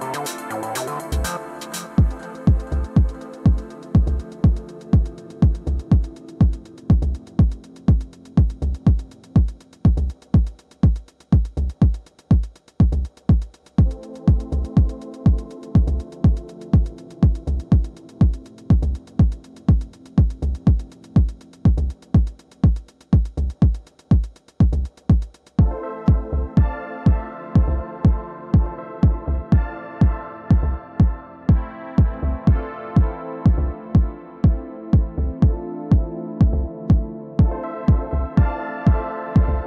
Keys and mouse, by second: 0.7 click, 1.4 w, 1.8 click, 2.7 click, 3.7 alt+click, 4.2 2, 4.9 click, 5.0 click, 5.9 click, 6.4 alt+click, 6.6 alt+x, 7.2 click, 8.1 click, 9.1 alt+click, 9.7 1, 10.2 click, 10.8 click, 11.7 alt+click, 13.1 alt+click, 14.0 4, 15.0-16.3 drag, 16.6 alt+middle click, 16.9-17.3 alt+drag, 17.9 2, 18.4 click, 19.9-25.0 right drag, 25.0 click, 25.8 click, 26.3 alt+middle click, 26.5 alt+click, 27.1 4, 27.5-28.5 drag, 28.9 middle click, 29.2 click, 30.5 click, 32.0 alt+click, 32.4-33.5 alt+drag, 34.0-37.3 r, 34.4 alt+drag, 35.3 alt+click, 35.5 click, 37.4-37.9 drag, 38.4 middle click, 38.6 alt+click, 39.1-39.6 alt+drag.